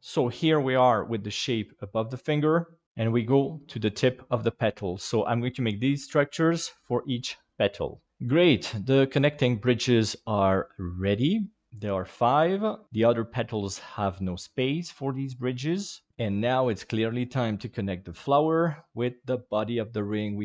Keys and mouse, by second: 3.5-4.7 middle drag, 5.2 middle click, 6.9 middle click, 7.1 space, 8.4-12.8 middle drag, 13.1-16.1 middle drag, 17.9 middle click, 19.1 shift+middle click, 20.3 middle click.